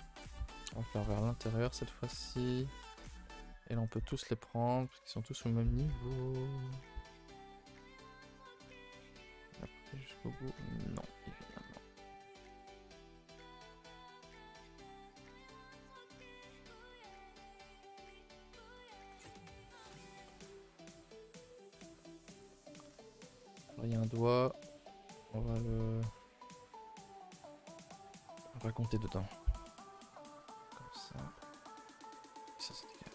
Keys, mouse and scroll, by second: 1.0-1.6 scroll up 2, 1.6 alt+shift+click, 1.9 middle click, 2.3 alt+shift+click, 2.6-3.9 middle drag, 3.9 alt+shift+click, 4.2 middle click, 4.8 alt+shift+click, 5.1 middle click, 5.5-5.9 scroll up 1, 5.9 alt+shift+click, 6.8 ctrl+z, 7.5 middle click, 8.0-8.5 scroll up 2, 8.5 alt+shift+Left, 9.3 z, 9.9 middle click, 10.7 alt+shift+Left, 11.5 z, 11.7 shift+middle click, 12.3 alt+shift+Left, 12.9 alt+shift+Left, 13.9 middle click, 14.3 alt+shift+click, 15.1 z, 15.9 alt+shift+click, 17.0 alt+click, 19.1 z, 19.5 alt+shift+click, 19.7 middle click, 20.7 alt+shift+click, 21.4 right click, 21.7 scroll down 4, 21.9 middle click, 22.3 a, 22.4 a, 22.5-24.4 middle drag, 24.4 scroll up 1, 24.6 shift+middle click, 25.6 click, 25.8 middle click, 26.2 a, 26.3 a, 26.4-29.1 middle drag, 29.1 click, 29.3 middle click, 30.0 alt+shift+click, 30.1 middle click, 30.7 alt+shift+click, 31.1 alt+shift+click, 31.3 middle click, 32.3 right click, 32.6 click.